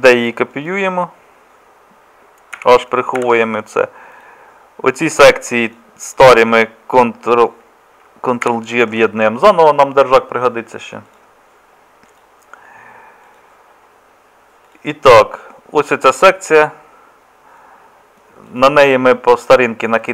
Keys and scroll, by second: 2.6 h, 3.2 h, 8.5 ctrl+j.